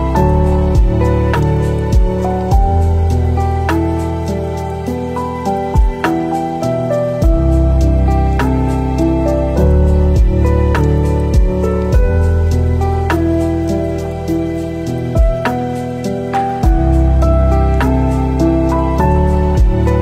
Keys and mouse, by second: 1.5 middle click, 11.3 middle click, 12.2-13.3 drag, 14.7 space, 16.6 middle click, 17.4 click, 18.0-18.5 drag, 18.6-20.0 drag.